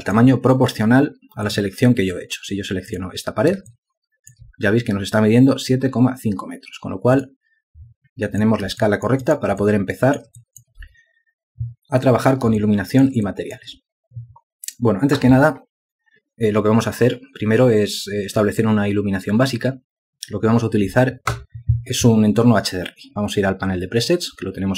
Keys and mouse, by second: 0.7 alt+click, 4.6 ctrl+alt+click, 9.7 alt+click, 10.5 alt+shift+click, 11.3 alt+click, 13.5 alt+shift+click, 14.2 alt+click.